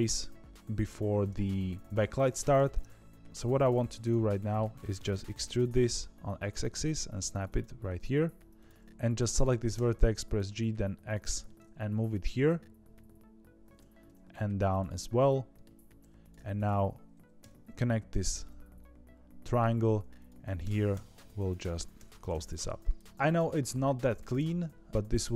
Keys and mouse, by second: 0.5 z, 2.5 2, 4.3 middle click, 5.3 e, 8.2 1, 9.7 g, 11.4-13.7 middle drag, 14.0 g, 14.9 middle click, 15.9 2, 16.1 click, 16.5 shift+click, 17.3 f, 18.3-19.5 middle drag, 20.2 click, 20.9 f, 21.9 f, 22.2 middle click, 22.9 click, 23.0 Tab, 23.0 middle click, 24.4 middle click.